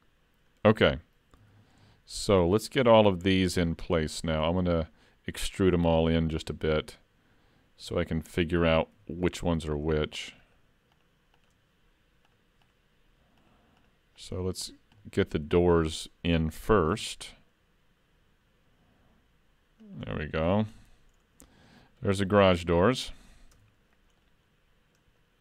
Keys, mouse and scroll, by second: 0.5-1.4 scroll down 1, 1.4 scroll down 1, 1.5 alt+a, 2.0 shift+middle click, 2.6 middle click, 7.8 3, 9.0 3, 9.2 click, 9.7 shift+click, 14.7-15.4 scroll down 2, 15.0 middle click, 16.9 e, 20.5 alt+a, 20.7 Tab, 21.2-22.1 scroll up 3, 21.5 middle click, 22.1-23.5 scroll down 2, 23.5 scroll down 1, 23.6 Tab, 23.8-24.2 scroll up 2, 24.2 middle click.